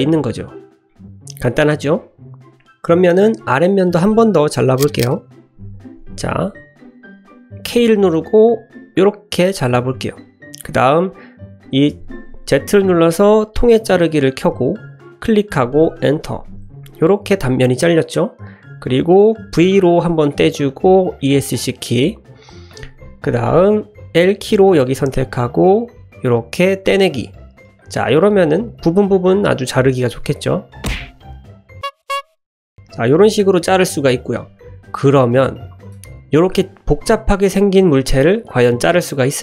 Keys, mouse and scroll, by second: 0.9 middle drag, 1.6 click, 2.0-2.7 drag, 2.7 middle drag, 2.9 shift+middle click, 3.5-3.8 middle drag, 4.5 middle click, 7.7 k, 16.4-18.4 middle drag, 19.5 v, 21.2 Escape, 24.2 l, 25.9 g, 27.2-27.6 middle drag, 27.8 click, 28.2-29.8 drag, 30.3-30.6 shift+middle drag, 32.7-33.5 middle drag, 34.7 shift+drag, 35.9 Tab, 36.3 click, 37.2 middle click, 37.9 shift+click.